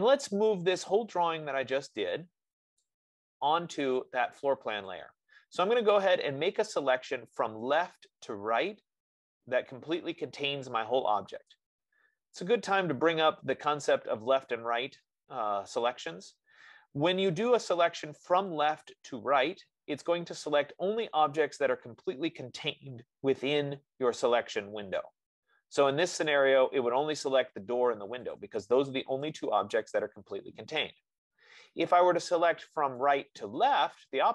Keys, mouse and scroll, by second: 0.3 click, 3.1 click, 11.8 click, 14.2 click, 26.4 click, 28.9 click, 31.1 click, 32.9 F15.